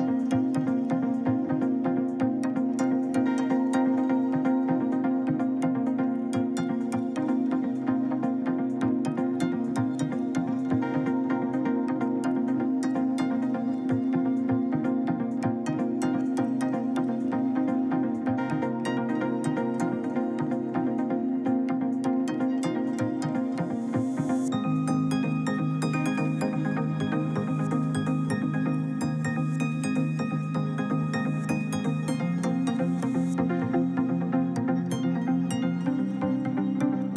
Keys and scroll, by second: 3.1 Escape, 17.3 1, 17.5 0, 17.8 Return.